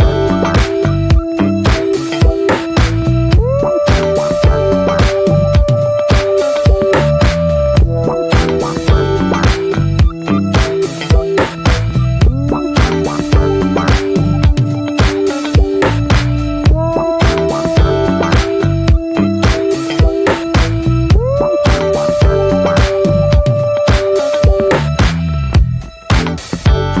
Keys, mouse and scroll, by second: 0.1-0.5 middle drag, 0.5 click, 0.7-1.6 scroll up 3, 0.8 shift+middle drag, 1.3 middle click, 1.6 Tab, 1.8-3.7 middle drag, 3.7 scroll up 1, 3.8 scroll down 2, 4.1-7.4 shift+middle drag, 7.4-8.4 scroll up 7, 8.4-9.5 shift+middle drag, 9.5 ctrl+r, 10.5 click, 10.6 ctrl+a, 11.0-11.3 scroll down 8, 11.3-11.9 shift+middle drag, 11.9 ctrl+a, 12.2 middle click, 13.1 click, 13.5-14.5 middle drag, 14.5 ctrl+s, 15.1 click, 15.5-16.7 shift+middle drag, 16.7 ctrl+a, 17.0 click, 17.1 click, 18.9 click, 19.1 scroll down 1, 19.3-20.7 shift+middle drag, 20.7 click, 20.9 scroll down 1, 21.1 middle click, 21.4-21.9 scroll up 1, 22.2 click, 23.0 scroll up 1, 23.3-25.9 middle drag, 25.9 click, 26.0-26.7 scroll up 1, 26.7-27.0 scroll down 2.